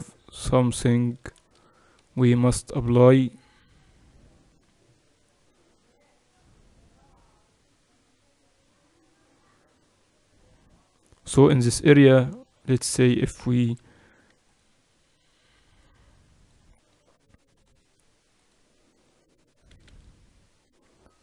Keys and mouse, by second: 1.3 z, 1.9 z, 2.7 a, 12.7-14.4 right drag, 13.6 ctrl+e, 15.7-19.5 drag, 19.6 a, 19.7 a.